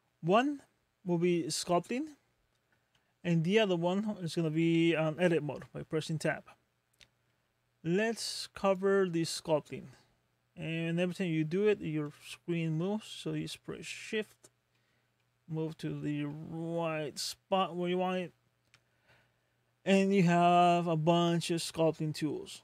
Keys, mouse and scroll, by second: 3.5 Tab, 7.3 Tab.